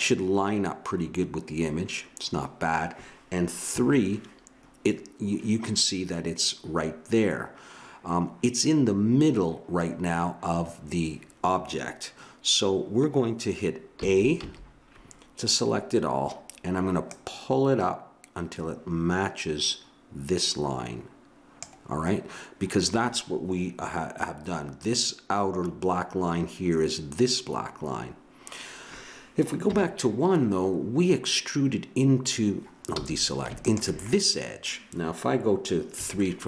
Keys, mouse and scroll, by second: 3.6 KP_3, 13.9 a, 14.4 a, 29.7 KP_1, 32.9 a, 36.0 KP_3.